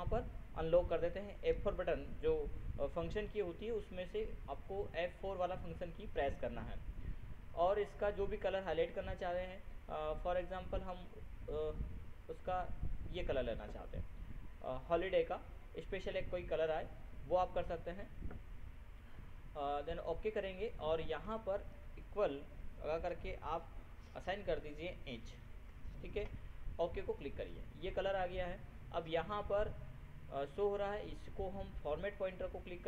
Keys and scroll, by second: 1.5 ctrl+F4.